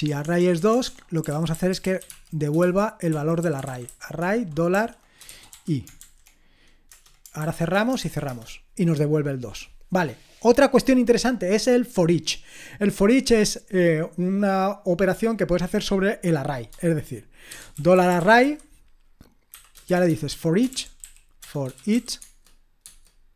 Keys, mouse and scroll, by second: 0.0-6.0 typing, 6.9 Return, 7.2-8.5 typing, 17.3-23.3 typing, 22.8 Tab.